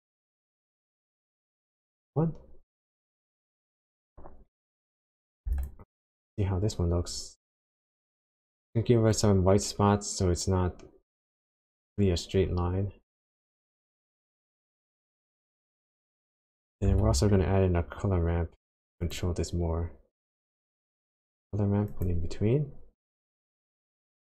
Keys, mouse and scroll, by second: 1.4 click, 4.5 click, 4.9 click, 5.6 ctrl+shift+click, 7.2-8.4 scroll up 7, 9.1 click, 14.5 click, 15.0 middle click, 16.3 click, 17.0 shift+a.